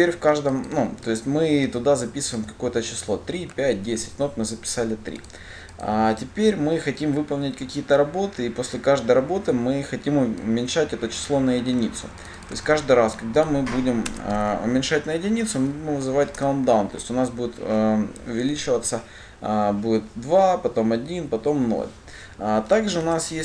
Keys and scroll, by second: 12.8 ctrl+c, 14.6 ctrl+v, 16.6 Return.